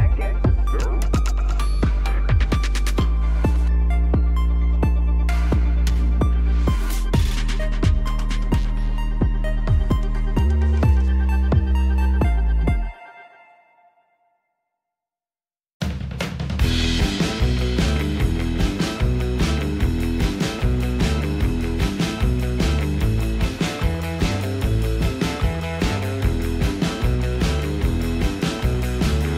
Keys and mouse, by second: 0.3-1.8 middle drag, 2.3 shift+middle drag, 3.3-3.6 middle drag, 3.8-4.2 shift+middle drag, 4.7 KP_7, 5.4 shift+middle click, 6.4 shift+middle click, 7.8-10.5 shift+drag, 11.2-11.9 middle drag, 12.9-14.0 middle drag, 14.2 shift+middle click, 14.6 middle click, 16.3-18.3 shift+drag, 18.9 click, 19.6 middle click, 20.4 KP_7, 21.2 shift+middle click, 21.9 shift+middle click, 22.7 shift+middle click, 23.4-26.2 shift+drag, 26.7 shift+middle click, 27.8-29.3 middle drag.